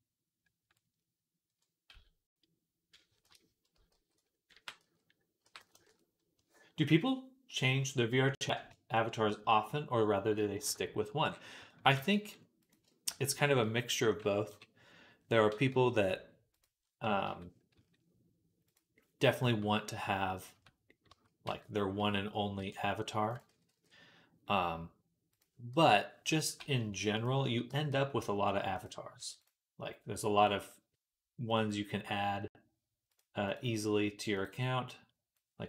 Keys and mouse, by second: 1.7 x, 3.8 alt+g, 4.4 r, 4.8-25.2 middle drag, 6.2 KP_1, 10.5 KP_Decimal, 11.8 g, 14.3 KP_3, 15.5 g, 17.6 s, 20.4 Tab, 20.9 a, 21.3 f, 22.4 e, 23.3 ctrl+z, 23.5 ctrl+z, 25.2-28.7 drag, 26.5 g, 26.7 e, 27.5 g, 28.7 middle click, 29.0 Tab, 29.2-35.6 right drag, 30.2-35.6 drag, 30.2-35.6 middle drag.